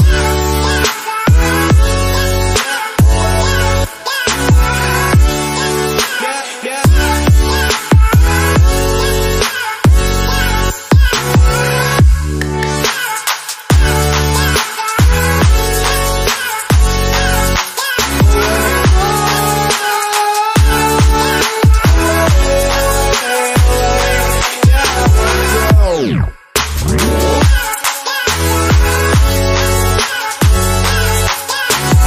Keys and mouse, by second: 0.5 click, 0.6-3.2 right drag, 3.2 click, 4.7 click, 7.1 click, 7.6 a, 8.9 shift+d, 12.9-14.2 shift+middle drag, 14.2 shift+d, 18.5 Tab, 20.2 middle click, 20.8 click, 20.9-22.6 shift+middle drag, 22.6 click, 23.2-27.6 shift+middle drag, 27.6 ctrl+alt+KP_0, 28.5 q, 29.7 Tab, 30.7 x.